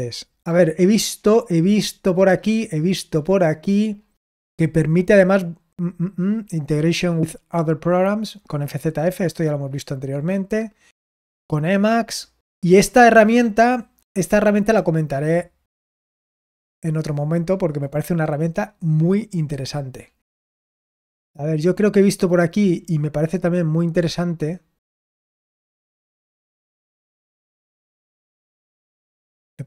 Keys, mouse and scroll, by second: 3.8-5.1 scroll down 1, 5.1-8.6 scroll down 1, 8.6-10.6 scroll down 1, 10.6-11.5 scroll down 1, 11.5-12.6 scroll down 1, 12.6-13.7 scroll down 1, 13.7-15.0 scroll down 1, 15.0-15.8 scroll down 1, 15.8-16.9 scroll down 1, 16.9-19.6 scroll down 1, 19.6-23.2 scroll down 1, 23.2-24.0 scroll down 1, 24.0-25.9 scroll down 1, 25.9-28.0 scroll down 1, 28.0-28.8 scroll down 1, 28.8-29.6 scroll down 1.